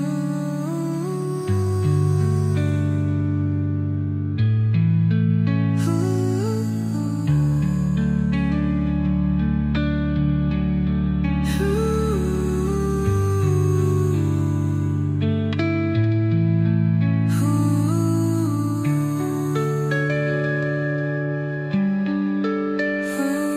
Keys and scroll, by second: 12.3 space.